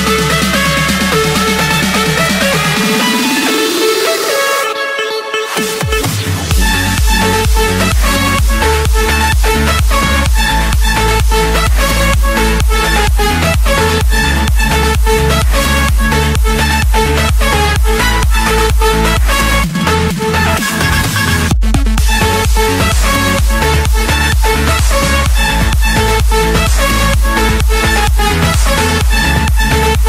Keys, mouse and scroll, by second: 0.1 Return, 0.8 Escape, 1.6 click, 2.3 click, 4.2-4.7 typing, 5.6 Return, 7.0 click, 7.9 click, 8.6 click, 9.1 click, 9.9 typing, 10.2 Return, 11.9 click, 13.2 click, 13.9 scroll down 1, 14.0-15.2 scroll, 15.4-16.9 scroll, 17.0 scroll, 18.7-19.3 typing, 20.9 Return, 22.5 click, 23.4 Return, 24.8 click, 27.9-28.7 scroll, 28.7 scroll.